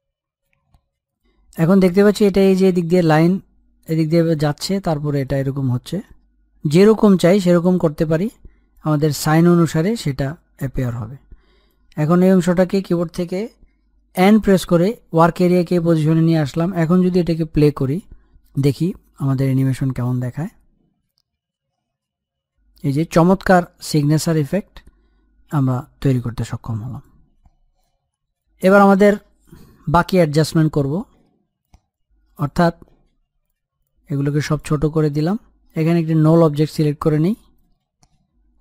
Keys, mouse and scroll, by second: 6.9-10.9 drag, 10.9-11.9 scroll down 1, 11.9-13.5 middle drag, 13.5-16.1 drag, 17.5-19.5 drag, 28.7 click, 29.0 scroll down 1, 29.3 middle click, 30.1-35.0 drag, 37.5 right click.